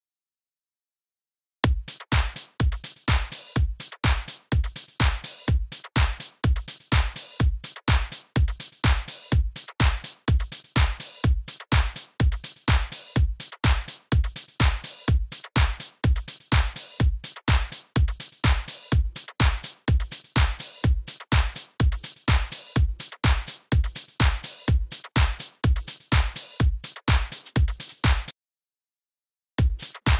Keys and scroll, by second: 0.9 super+d, 1.6 s, 11.9 Left, 13.7 Up, 15.1 Right, 15.7 Down, 17.2 Right, 17.3 Down, 26.3 d, 29.1 BackSpace, 29.2 Return, 29.5 space, 30.0 super+Right.